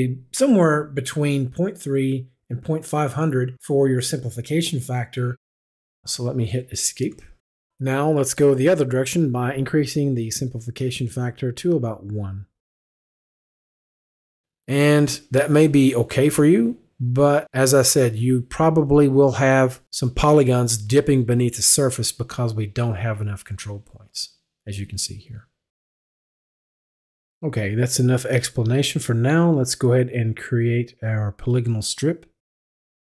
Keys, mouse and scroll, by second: 6.5 Escape, 7.7 Escape, 8.6 click, 9.3 click, 10.8 click, 14.2 click, 27.7 right click, 28.5 click, 32.7 click.